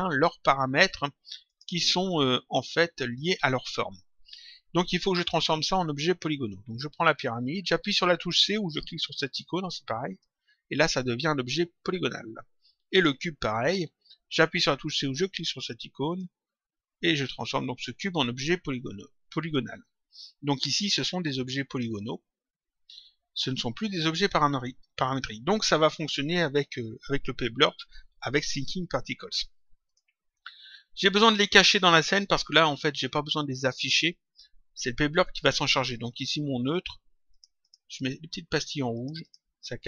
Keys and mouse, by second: 1.4 click, 6.6 click, 10.1 click, 12.9 click, 16.0 click, 29.8 click, 37.2 click, 38.8 click.